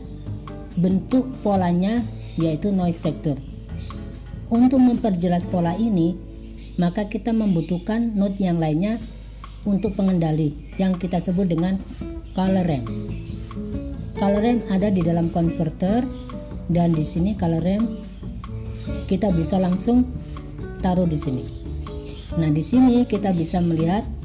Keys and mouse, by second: 9.8-21.6 drag, 23.0-24.2 drag.